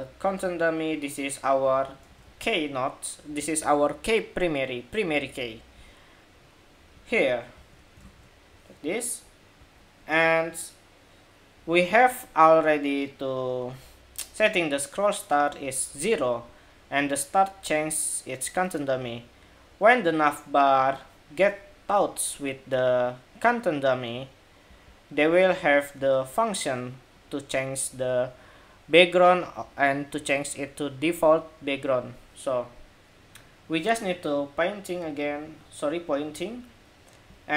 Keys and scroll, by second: 1.8 super+c, 7.7 super+v, 9.3 super+s.